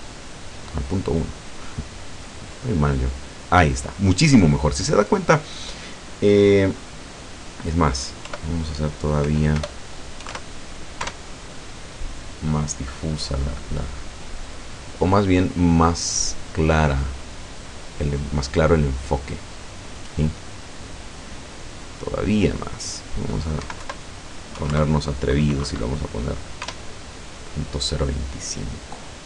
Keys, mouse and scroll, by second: 7.1 click, 8.3 End, 9.3 BackSpace, 10.4 KP_Enter, 11.1 F12, 22.5 click, 23.7 Right, 23.9 Left, 24.6 KP_2, 24.8 KP_Enter, 26.7 F12.